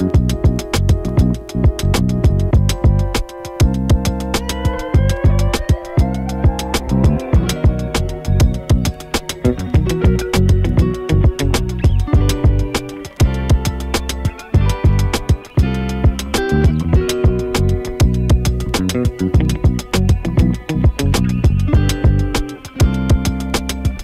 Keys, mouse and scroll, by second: 6.9 ctrl+x, 17.3 click, 21.3 click.